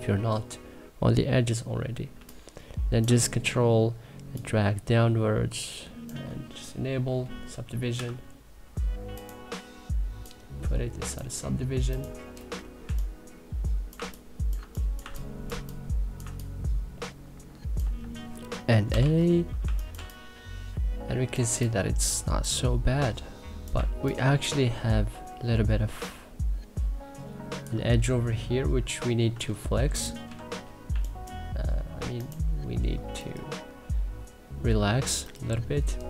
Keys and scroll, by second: 1.8 3, 7.6 q, 12.2 Delete, 12.5 3, 13.6 2, 14.2 3, 18.3-19.3 typing, 21.0 2, 29.9 q, 30.5 3.